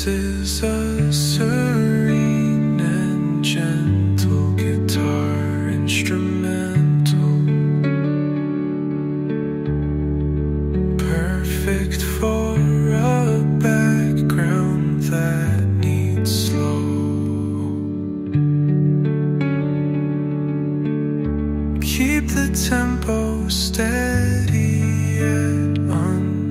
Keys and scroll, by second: 6.5-7.4 typing, 7.9 Return, 23.9 space, 25.2 Delete.